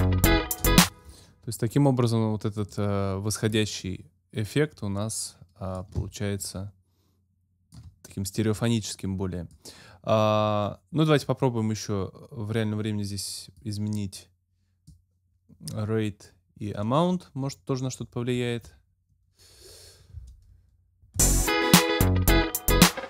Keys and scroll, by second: 0.8 space, 21.2 space.